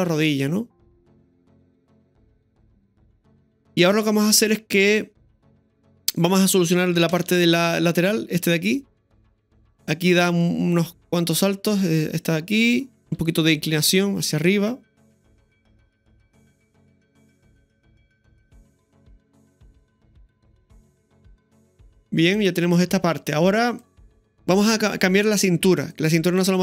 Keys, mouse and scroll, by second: 4.9 click, 5.7-6.9 middle drag, 7.1 ctrl+KP_3, 8.5-9.2 shift+middle drag, 9.8 space, 10.8-13.0 drag, 13.0 right click, 13.0 middle click, 13.2 r, 15.0 ctrl+v, 15.0 click, 15.0 space, 15.7 click, 20.4-21.8 drag, 20.4 middle click, 22.3-24.1 drag, 24.1 shift+middle click, 24.1 space, 24.6 scroll up 1, 24.7 shift+middle click, 25.9 right click.